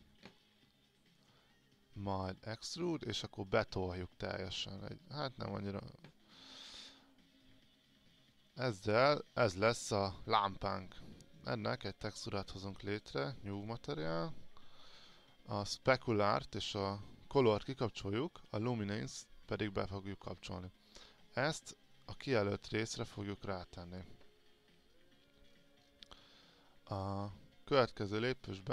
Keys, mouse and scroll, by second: 1.4 right click, 2.7-6.3 drag, 6.5-6.9 scroll up 1, 8.0-23.6 drag, 25.7-26.4 scroll down 1, 27.1-28.7 drag.